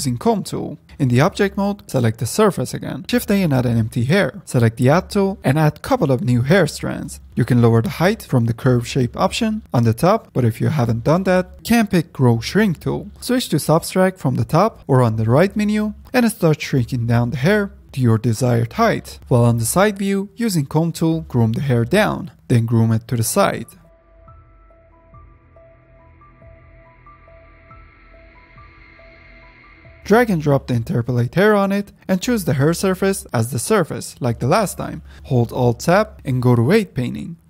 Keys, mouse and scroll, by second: 0.0-0.9 drag, 0.9 ctrl+Tab, 1.3 ctrl+Tab, 2.7 shift+a, 5.1 ctrl+Tab, 5.4 click, 5.8 f, 6.4 scroll up 1, 6.4-7.9 middle drag, 7.9-9.6 drag, 9.6 ctrl+z, 9.8-10.4 drag, 10.4-12.1 middle drag, 12.3 click, 12.9-13.3 scroll down 2, 13.3 n, 14.8 click, 15.6 click, 16.0-19.5 drag, 19.5 f, 20.0-20.6 middle drag, 20.6-22.3 drag, 22.3 middle click, 22.4-22.9 drag, 22.9 middle click, 23.0 click, 23.5 middle click, 23.6 ctrl+z, 23.7 drag, 23.9 middle click, 24.0 click, 24.2 middle click, 24.3 scroll up 1, 24.5 drag, 24.7 middle click, 24.8 f, 25.0 drag, 25.2 shift+middle click, 25.2 drag, 25.3 middle click, 25.5 drag, 25.6 middle click, 25.7 drag, 25.8-26.2 middle drag, 26.2 drag, 26.4 middle drag, 26.5 click, 26.6 middle click, 26.7 click, 26.8 middle drag, 27.1 click, 27.4 middle click, 27.5 drag, 27.8 middle click, 27.9 click, 28.2 middle click, 28.4 f, 28.5 middle drag, 28.6 click, 28.9 ctrl+z, 29.0-29.6 drag, 29.6 middle click, 29.8 f, 29.8-30.9 drag, 33.2-35.1 drag, 35.9 click, 36.8 ctrl+Tab.